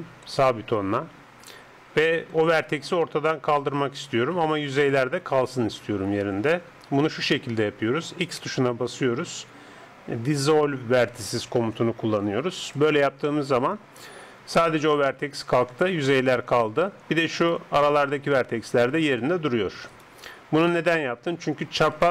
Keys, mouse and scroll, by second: 8.2 x, 17.4-21.5 right drag.